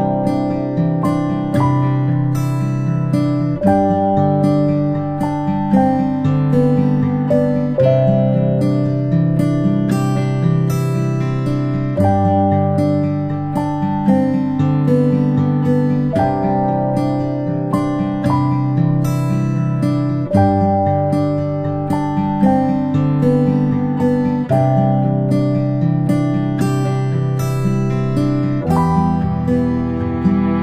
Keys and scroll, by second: 1.1 i, 5.1-6.5 typing, 8.5 i, 10.8 ctrl+z, 12.5 b, 13.1 ctrl+z, 13.5 ctrl+z, 23.4 i, 25.1 b.